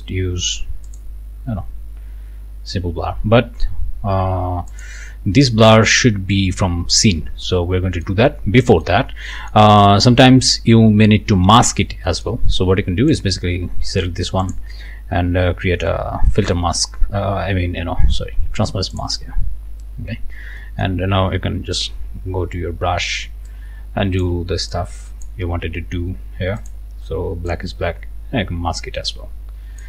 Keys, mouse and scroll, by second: 0.8 click, 4.7 click, 5.4 scroll down 2, 5.9 click, 7.4 right click, 8.6 right click, 9.0-9.7 scroll up 2, 9.3 right click, 12.1 right click, 13.1 click, 14.4 click, 18.9 click, 20.6 click, 21.7 b, 23.5 shift+click, 24.7 shift+click, 26.6 click, 27.5-29.8 drag.